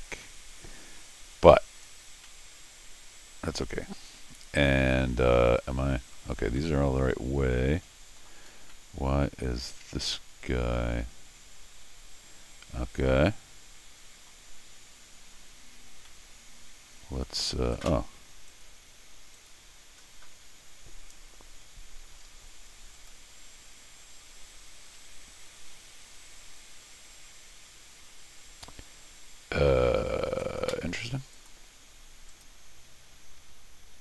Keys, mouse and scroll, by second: 0.1 scroll up 1, 0.2-1.5 middle drag, 1.8 scroll up 1, 2.2-6.1 middle drag, 6.6-8.2 middle drag, 8.5 scroll up 1, 8.7 middle click, 10.0-14.3 middle drag, 16.1-17.2 middle drag, 18.5 click, 19.4 click, 22.9 click, 31.3 click, 32.3 click.